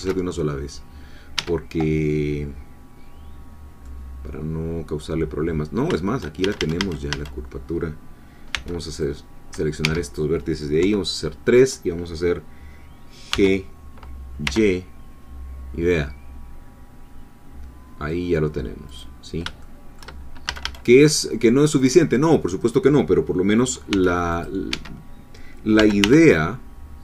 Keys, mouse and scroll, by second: 1.4 Escape, 3.3-3.8 scroll down 2, 3.8-5.5 middle drag, 5.5-5.8 scroll up 1, 6.0 shift+middle click, 6.4 shift+a, 8.5 c, 9.0 click, 9.8 Escape, 10.8 3, 13.3 g, 14.4 y, 18.9 click, 19.6 shift+middle click, 20.5 shift+a, 21.8 click, 23.9 c, 24.3 click, 24.7 Escape, 25.8 g, 26.0 y.